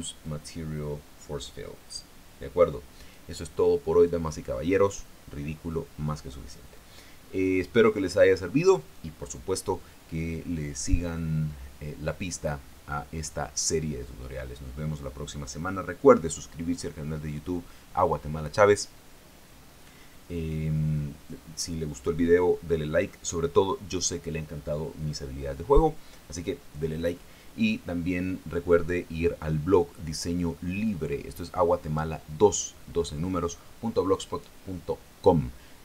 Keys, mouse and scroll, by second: 0.9-4.0 drag.